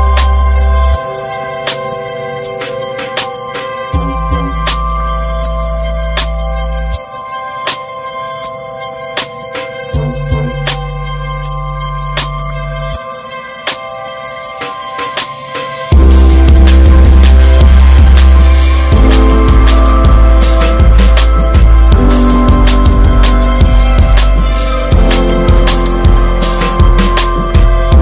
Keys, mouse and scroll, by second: 5.0 middle click, 5.3 ctrl+s, 5.5 scroll down 3, 5.8-6.8 middle drag, 6.8-7.9 ctrl+scroll down 2, 10.4 alt+z, 10.7-11.3 ctrl+scroll down 2, 11.5-12.2 ctrl+scroll up 2, 13.4-14.7 middle drag, 14.7 alt+z, 15.1-15.7 shift+middle drag, 15.7 click, 17.1 alt+z, 17.3 alt+middle click, 17.7 scroll up 2, 18.1-18.8 shift+middle drag, 18.8 click, 19.6 ctrl+z, 20.1 s, 23.9 ctrl+z, 24.5 s, 26.7 s.